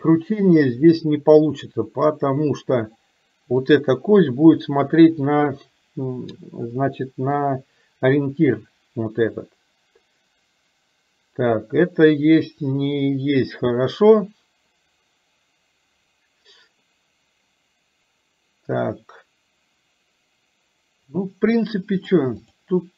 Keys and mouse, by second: 3.8 click, 6.8 middle click, 22.1 click.